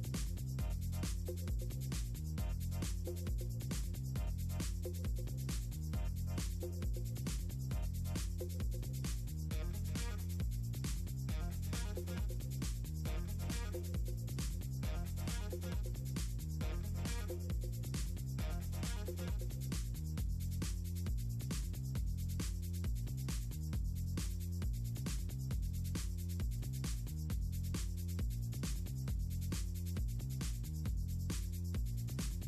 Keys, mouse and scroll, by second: 0.0 ctrl+click, 0.5 ctrl+z, 0.9 click, 1.8 click, 4.9 click, 7.4 click, 7.8 click, 8.1 click, 8.3 click, 8.7 click, 9.5 ctrl+z, 9.7 ctrl+middle click, 11.0 click, 11.2-12.9 drag, 13.3-14.5 drag, 14.9 click, 15.3 right click, 17.3 right click, 18.9 click, 19.4 right click, 20.2 click, 20.5 right click, 22.1 click, 22.4 click, 23.7 click, 24.3 click, 25.4 click, 26.0 click, 26.4 click, 27.6 click, 28.0 click, 29.4 click, 29.9 middle click, 30.0 click, 30.2 click, 30.5-31.7 drag, 32.0 middle click.